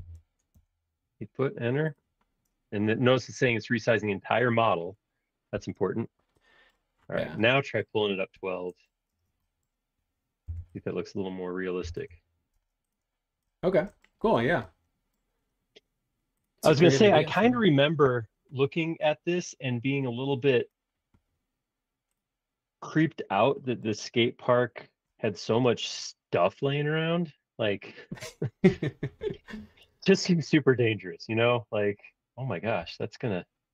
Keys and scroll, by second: 0.5 Return, 5.5 shift+z, 9.1 space, 10.4-12.5 typing, 29.4 r, 32.8 r.